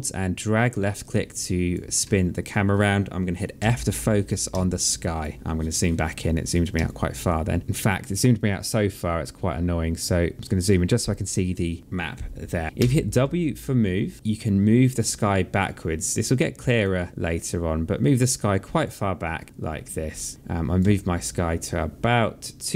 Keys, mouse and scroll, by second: 1.8 alt+middle click, 3.3 f, 4.3 alt+click, 6.6 alt+click, 12.6 w, 13.1 alt+click, 14.9 click, 17.1 alt+click, 18.4 alt+click, 20.7 alt+click, 22.5 click.